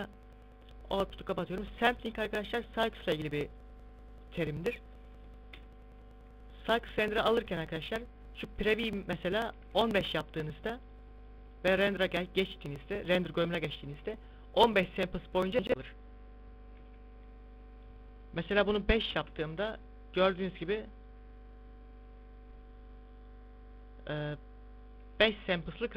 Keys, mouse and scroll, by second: 3.9 click, 5.2 KP_0, 8.4 click, 11.2 click, 17.2 z, 18.4 click, 21.1 click, 22.2 click.